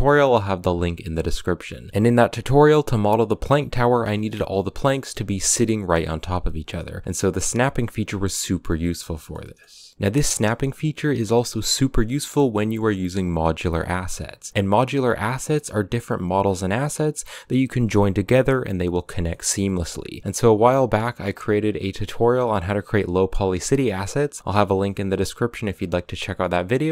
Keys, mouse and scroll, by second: 0.9 shift+d, 3.1 a, 3.9 shift+d, 6.3 scroll up 1, 6.4 scroll down 7, 6.6 middle click, 6.9 scroll up 1, 7.0-8.8 shift+middle drag, 8.8 shift+d, 10.2 a, 11.7 right click, 12.4 right click, 12.9 right click, 13.5 right click, 14.0 right click, 14.5 scroll down 2, 15.5 right click, 16.0 right click, 16.5 right click, 19.1-20.0 middle drag, 20.0 scroll up 1, 20.2 scroll down 1, 20.4 click, 23.2 click, 24.3 scroll up 1, 24.4 z, 24.6 middle click, 24.9 z, 25.5 shift+middle click, 25.9 scroll up 4, 26.6 g.